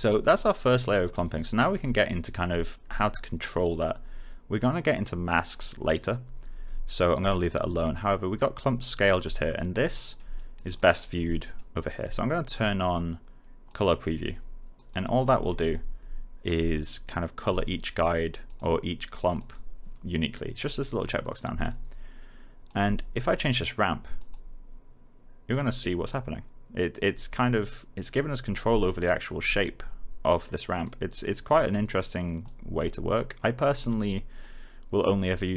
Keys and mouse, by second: 1.2 alt+right click, 6.6 alt+right click, 9.3 alt+click, 10.0 alt+middle click, 10.3 alt+right click, 10.7 alt+click, 11.2 alt+middle click, 13.6 click, 16.7 alt+click, 21.9 click.